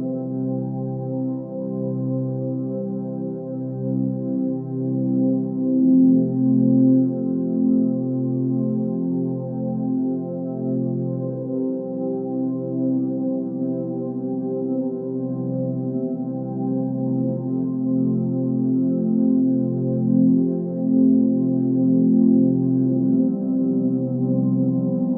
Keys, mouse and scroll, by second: 4.2 ctrl+space, 11.3 ctrl+space.